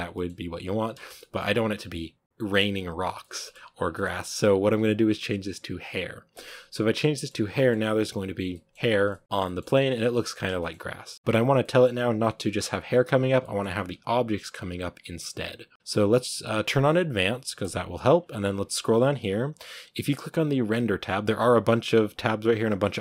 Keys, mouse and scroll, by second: 0.0 middle click, 0.4-0.8 scroll up 2, 0.8 space, 1.0-2.9 middle drag, 2.9 scroll down 1, 3.1-3.5 shift+middle drag, 3.5-4.3 scroll up 5, 3.8 middle drag, 4.0 shift+middle click, 6.5 click, 7.0 middle click, 7.2 scroll down 2, 7.4 middle drag, 7.6-8.2 scroll up 1, 8.2 scroll down 3, 8.4-8.7 middle drag, 8.7-9.3 scroll up 5, 8.9 middle drag, 9.3-10.3 middle drag, 10.3 scroll down 2, 10.5 shift+middle click, 11.1-11.5 scroll up 1, 11.5-12.1 middle drag, 12.1-13.3 scroll down 2, 13.3-17.5 middle drag, 17.5 click.